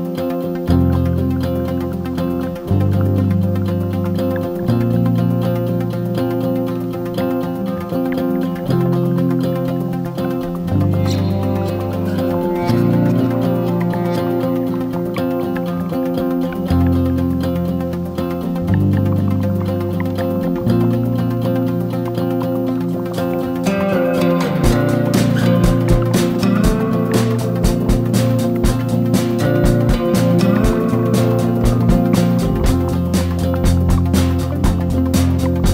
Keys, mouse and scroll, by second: 1.4 shift+9, 4.7-11.4 shift+drag, 11.8 ctrl+g, 12.6 click, 13.4-20.9 drag, 21.6 right click, 22.2 click, 23.6-31.9 shift+drag, 32.2 ctrl+g, 33.4-35.7 drag, 33.4 shift+9.